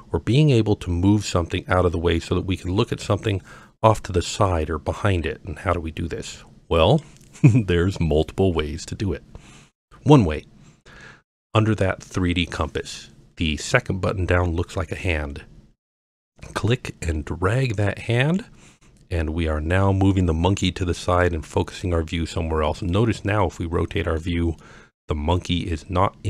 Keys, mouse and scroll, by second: 2.3-3.3 scroll down 2, 5.5-6.3 scroll up 2, 17.8-21.2 drag, 22.9-24.2 middle drag, 24.6-25.3 middle drag, 25.7-26.2 middle drag.